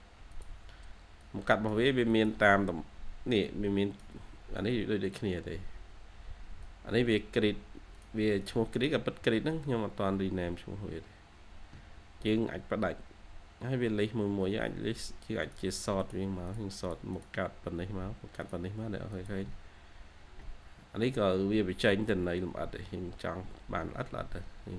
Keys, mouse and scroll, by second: 2.6-4.7 scroll up 1, 8.3 double click, 9.2-9.6 scroll down 1, 11.6-12.7 scroll up 1, 16.3 double click, 19.4 scroll down 1, 22.6 scroll up 1, 22.7 scroll down 1, 23.7-24.1 scroll up 1.